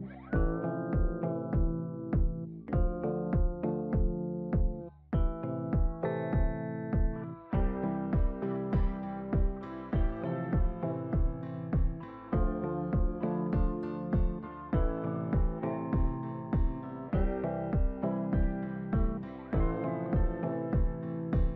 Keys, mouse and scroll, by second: 1.7 click, 4.8 alt+Up, 5.5 typing, 6.4 click, 8.1-9.2 scroll up 1, 9.2 click, 10.0-10.7 scroll down 1, 10.8 scroll down 1, 15.9 right click, 18.1-21.5 drag.